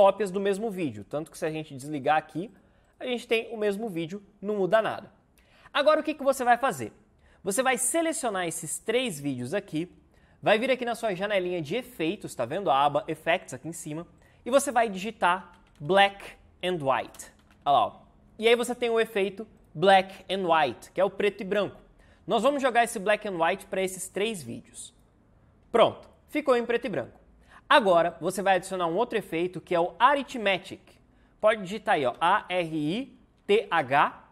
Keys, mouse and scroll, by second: 15.1-17.9 typing, 29.6 Return, 31.8-33.7 typing.